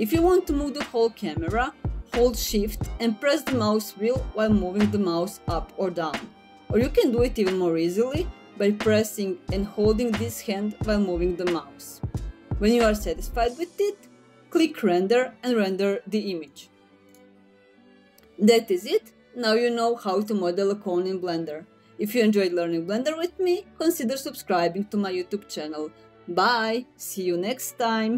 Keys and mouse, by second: 3.7 shift+middle click, 10.7 click, 16.9-17.8 drag.